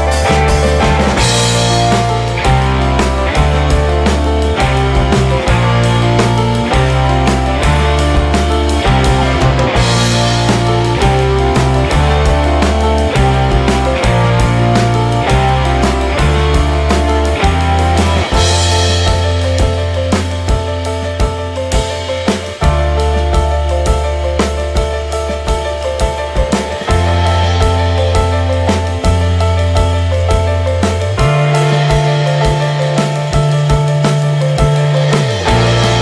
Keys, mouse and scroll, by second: 0.4-2.2 drag, 2.7-3.4 shift+middle drag, 3.4 click, 3.6 shift+middle click, 4.5-7.0 drag, 7.4-11.3 drag, 13.6 click, 14.2-14.9 shift+middle drag, 14.9-15.2 scroll up 1, 15.2 scroll down 2, 15.4-16.2 shift+middle drag, 16.2-19.6 drag, 19.6-20.0 scroll down 10, 20.0-20.7 scroll up 7, 20.2 shift+middle click, 20.7 shift+middle click, 21.0 click, 21.3 click, 22.2-25.4 drag, 25.4-25.7 scroll down 2, 25.7-26.2 shift+scroll up 2, 26.2 ctrl+s, 27.0-28.4 drag, 28.8-29.8 drag, 30.7 click, 31.1 ctrl+s, 31.4 click, 31.8 scroll down 3, 32.8-34.4 drag, 34.4-34.9 scroll down 10, 34.9-35.2 scroll up 1, 35.2 shift+middle click.